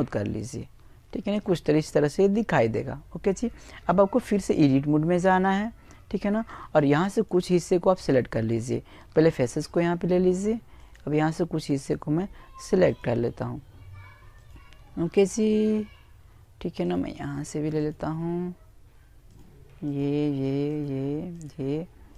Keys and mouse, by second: 2.0 click, 4.8-7.7 right drag, 7.3 click, 8.5-22.1 right drag.